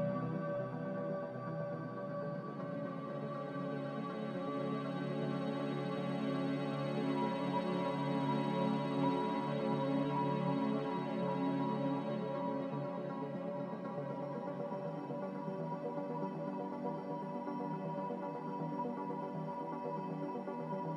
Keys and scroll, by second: 8.9 z, 11.2 a, 13.8 ctrl+z.